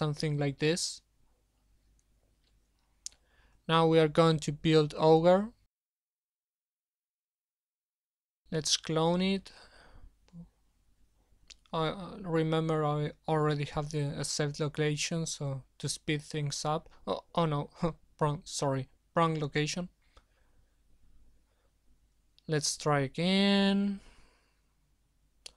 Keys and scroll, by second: 9.9 ctrl+c, 11.7 alt+Tab, 12.6 ctrl+v, 24.0 shift+o.